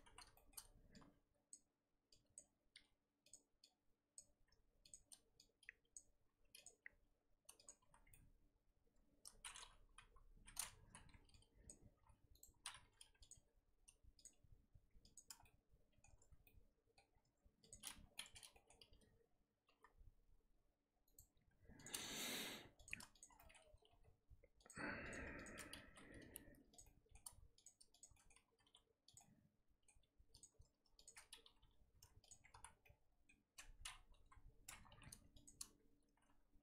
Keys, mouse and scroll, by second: 0.1 z, 0.3 shift+middle click, 0.6-0.9 scroll up 1, 1.5 click, 2.3 click, 2.7 r, 4.1 click, 4.4 r, 5.9 click, 6.2 r, 6.7 g, 7.9 z, 8.1-9.9 middle drag, 9.9 KP_1, 10.9 z, 11.6 click, 11.9 r, 12.6 z, 12.8 r, 13.3 g, 14.3 r, 15.4 scroll down 1, 15.4 middle click, 16.1 ctrl+z, 16.4 middle click, 17.1 scroll up 1, 17.7 click, 18.1-19.7 middle drag, 19.7 g, 21.7 click, 22.0 middle click, 22.2 scroll up 2, 22.5 2, 22.8 click, 23.2 shift+click, 23.3 middle click, 23.7 g, 25.1 click, 25.4 shift+click, 25.8 g, 26.9 middle click, 27.6 click, 28.0 shift+click, 28.1 middle click, 28.5 g, 29.2-30.4 middle drag, 30.4 click, 31.0 shift+click, 31.4 g, 32.3 Tab, 32.6 z, 32.8 scroll down 1, 32.8 middle click, 33.5 Tab, 34.2 KP_1, 35.4 alt+click, 36.5 s.